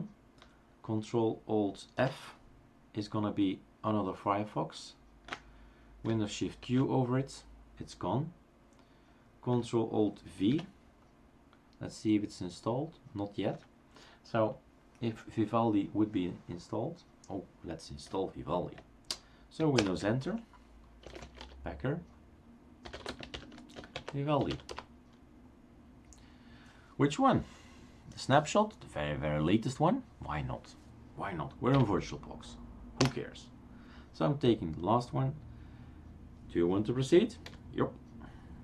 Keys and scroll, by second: 2.0 ctrl+alt+f, 6.6 shift+super+q, 10.5 ctrl+alt+v, 19.8 super+Return, 21.0-25.0 typing, 31.9 1, 33.1 Return, 37.6 y.